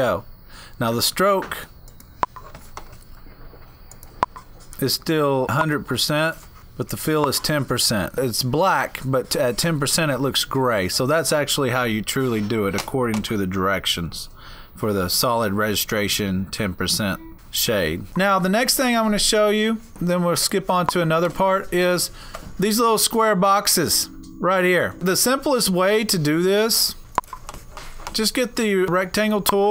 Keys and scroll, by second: 18.0 Down.